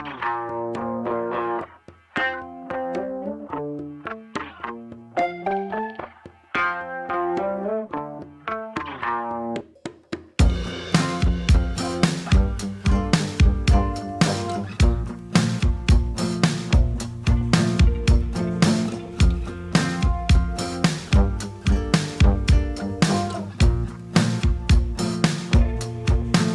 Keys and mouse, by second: 1.0 r, 1.4 g, 2.0 ctrl+z, 2.0 click, 2.0 e, 2.2 e, 3.2 Tab, 3.3 click, 6.4 ctrl+z, 6.8 click, 7.7 click, 8.0 middle click, 8.4 middle click, 9.0 ctrl+z, 9.6 f, 10.3 click, 10.5 ctrl+z, 10.5 s, 11.1 alt+s, 11.9 ctrl+z, 12.2 s, 13.8 g, 13.9 click, 14.9 g, 15.7 click, 17.9-19.4 drag, 19.4 middle click, 19.4 f, 19.5 f, 20.0 click, 20.8-22.0 drag, 22.2 ctrl+z, 22.5 click, 24.1 ctrl+click, 24.4 q, 24.8-26.4 drag.